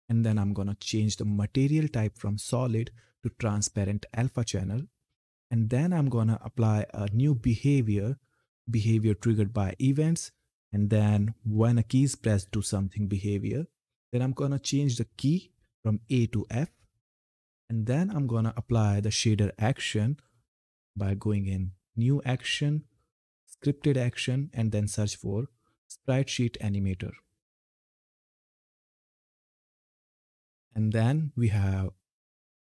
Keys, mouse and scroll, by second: 1.0 click, 12.4 click, 16.0 f, 17.0 click, 20.0 click, 25.7-26.1 typing, 29.3 Return, 31.2-32.6 drag.